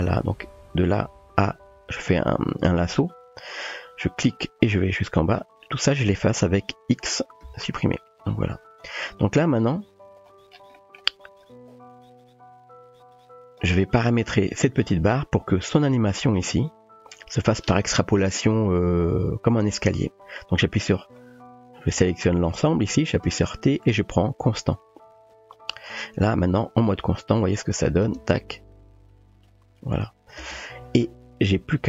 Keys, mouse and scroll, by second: 0.8-2.9 drag, 2.7-5.8 typing, 4.0-5.5 drag, 6.9-8.0 typing, 10.9 drag, 11.5-13.6 drag, 16.2 click, 17.1 click, 21.2-22.5 drag, 21.2 typing, 22.3-23.4 typing, 25.3-26.0 typing, 28.1 space, 30.4 space.